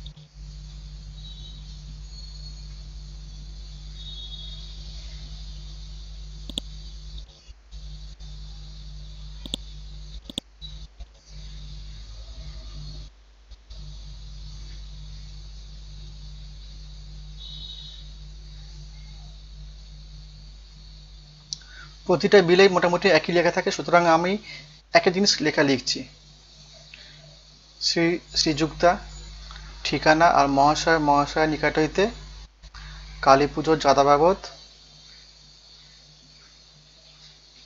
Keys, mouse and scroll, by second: 0.1 F5, 1.8-5.2 typing, 5.5 ctrl+a, 6.5 click, 7.4 KP_1, 7.6 KP_6, 9.4 click, 11.1 ctrl+Down, 18.1-19.5 typing, 25.9 ctrl+a, 26.2 Return, 26.5-27.6 typing, 29.8-35.0 typing, 36.1-37.6 typing.